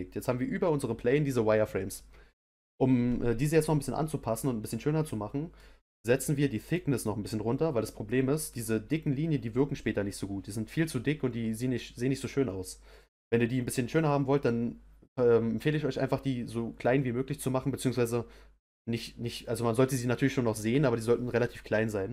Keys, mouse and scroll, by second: 3.5-4.0 scroll up 2, 4.0-6.6 middle drag, 6.6-9.6 drag.